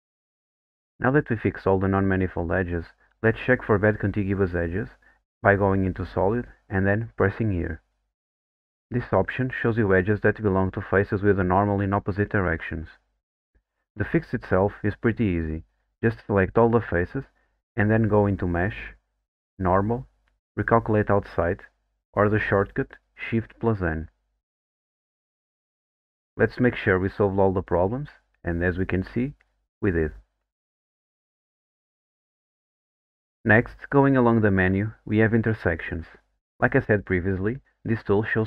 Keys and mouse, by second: 1.4 click, 5.6 click, 6.8 click, 14.9 click, 15.2 3, 15.8 a, 18.1-24.2 drag.